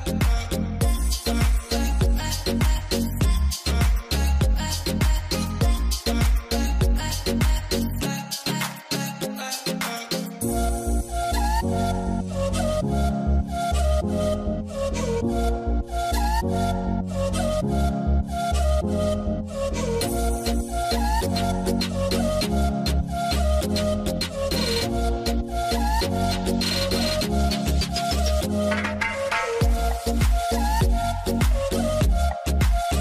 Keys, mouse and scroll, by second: 5.3 double click, 5.7-6.7 scroll down 1, 12.6 scroll down 1, 13.9 double click, 23.0 double click, 23.4 alt+q, 23.7 alt+middle click, 24.8 scroll up 1, 25.2 middle click.